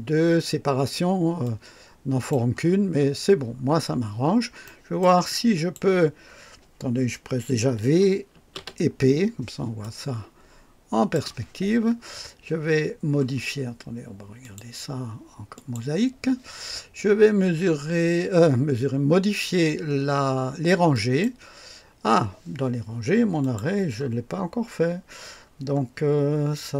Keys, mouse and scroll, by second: 1.4-2.5 drag, 2.7 scroll down 1, 3.7 scroll down 2, 4.6-5.2 right drag, 5.3-5.9 drag, 8.1-9.1 typing, 9.8-11.3 drag, 14.4 click, 15.5 click, 20.9 click, 23.4 click, 24.2-24.6 scroll down 1, 25.3-25.7 scroll down 1.